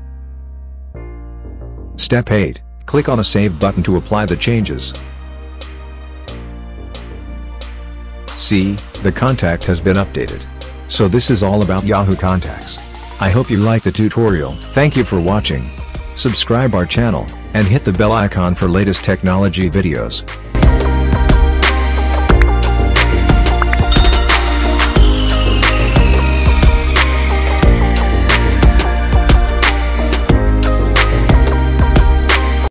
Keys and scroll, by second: 1.4 2, 2.4 1, 2.6 4.